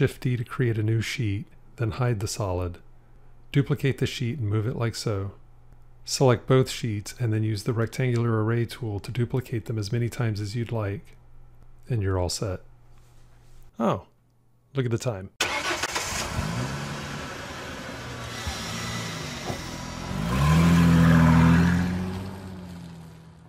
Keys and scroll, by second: 0.7 shift+d, 3.7 shift+d.